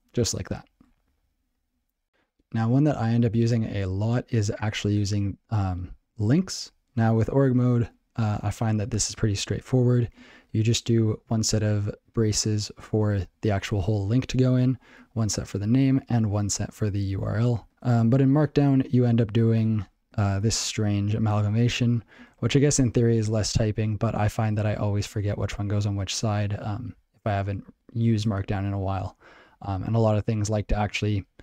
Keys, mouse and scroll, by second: 0.3 ctrl+g, 7.7 click, 7.8 click, 8.2 ctrl+n, 10.1 ctrl+n, 12.9 space, 17.4 r, 17.7 ctrl+g, 21.9 click, 22.0 click, 22.3 ctrl+f, 22.9 ctrl+alt+f, 23.2 ctrl+alt+f, 23.8 ctrl+alt+b, 24.2 ctrl+alt+b, 25.3 ctrl+alt+f, 25.5 ctrl+alt+f, 26.1 ctrl+alt+b, 26.6 ctrl+alt+b, 27.4 ctrl+alt+b, 28.1 ctrl+a.